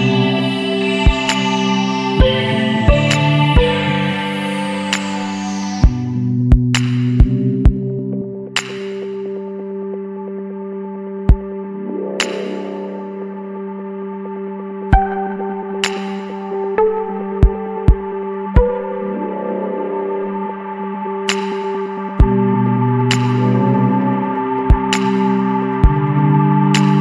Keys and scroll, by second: 1.2 space, 2.2 space, 2.9 ctrl+z, 4.1 space, 4.8 space, 5.8 space, 6.2 space, 6.6 space, 7.2 space, 9.7 space, 10.2 space, 10.3 ctrl+alt+z, 12.3 space, 12.8 space, 13.1 ctrl+=, 13.5 ctrl+z, 13.8 Delete, 14.2 ctrl+=, 14.3-16.6 typing, 17.4 ctrl+z, 18.5 Delete, 19.9 space, 20.1 Delete, 20.4 Delete, 20.5 space, 22.6 space, 22.8 Up, 24.1 space, 24.9 Delete, 25.2 ctrl+=, 25.4 space.